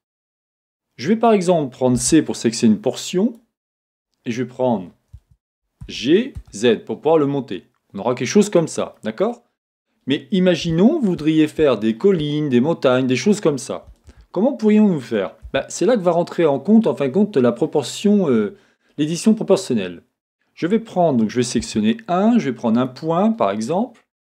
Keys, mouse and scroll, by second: 2.0 c, 5.3 Escape, 5.9 g, 8.9-22.9 middle drag, 9.5-10.7 scroll up 2, 11.3-11.7 scroll up 2, 12.4-12.9 scroll down 2, 15.5 a, 21.6 1, 22.7 1, 22.9 click.